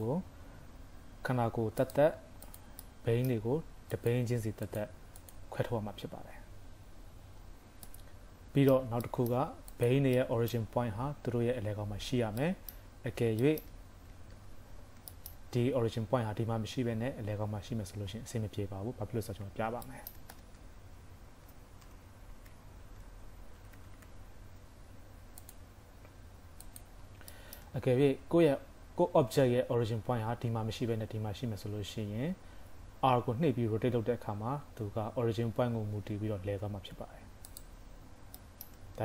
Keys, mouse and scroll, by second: 1.2 g, 2.5 click, 2.9 middle click, 4.0 click, 4.6 click, 7.9 middle click, 9.1 shift+middle click, 9.8 click, 10.2 middle click, 10.8-11.8 scroll up 4, 12.1-12.6 scroll down 3, 12.5 middle click, 12.9 KP_3, 13.2 scroll up 2, 13.5 shift+middle click, 14.4 shift+c, 14.7-15.2 scroll up 3, 15.2 shift+middle click, 18.2-18.7 scroll down 1, 18.7 scroll up 2, 19.6 scroll down 2, 19.9 shift+middle click, 20.4 space, 27.4 shift+middle click, 33.2 scroll down 2, 33.7 scroll down 1, 33.7 r, 38.0 scroll up 3, 38.5 shift+middle click.